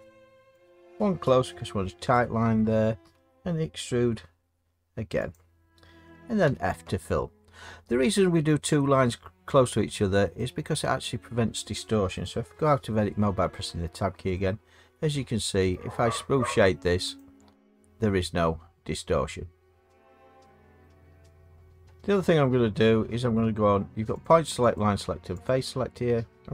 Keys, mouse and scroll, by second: 0.7 click, 3.0 e, 4.2 s, 5.3 click, 6.4 f, 11.3 middle click, 13.7 Tab, 15.1 middle click, 15.7 right click, 17.2 click, 20.4 middle click, 21.8 Tab, 21.8 middle click, 24.2 click, 24.8 click, 25.5 click.